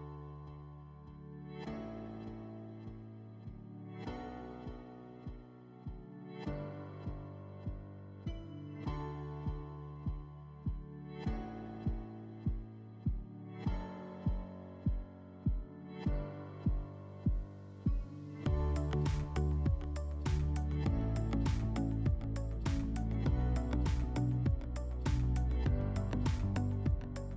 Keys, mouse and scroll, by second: 0.8-2.3 drag, 3.2 click, 5.0 click, 5.5 click, 6.8 click, 8.1 click, 9.6 click, 10.3-11.8 drag, 11.9-13.5 drag, 17.2-18.8 drag, 18.9-19.6 middle drag, 20.3 click, 21.4 click, 24.6-25.8 drag.